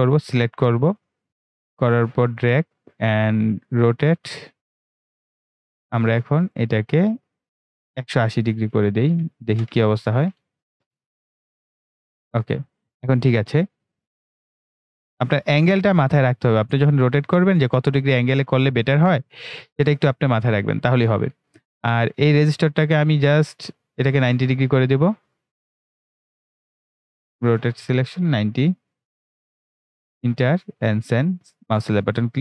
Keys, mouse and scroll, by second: 12.6 right click, 13.3-21.6 drag, 21.6-27.5 drag, 31.0-32.4 drag.